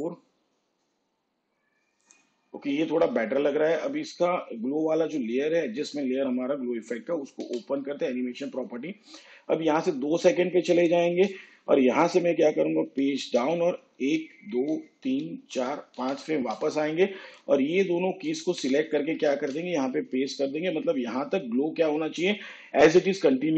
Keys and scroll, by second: 7.5 u, 12.9 shift+Page_Up, 14.1 ctrl+Left, 14.9 ctrl+Left, 15.4 ctrl+Left, 16.4 ctrl+Left, 19.1 ctrl+c, 19.7 ctrl+v.